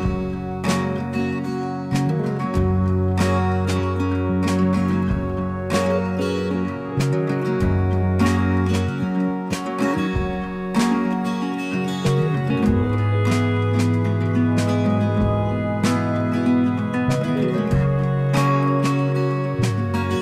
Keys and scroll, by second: 0.0-0.7 typing, 1.6 Return.